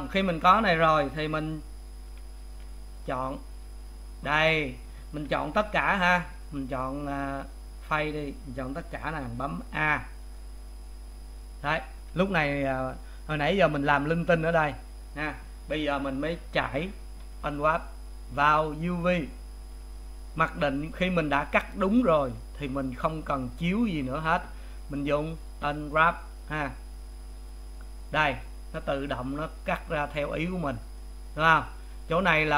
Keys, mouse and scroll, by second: 2.6 a, 7.0 click, 7.6 click, 9.7 a, 27.5 click, 29.6-32.5 middle drag.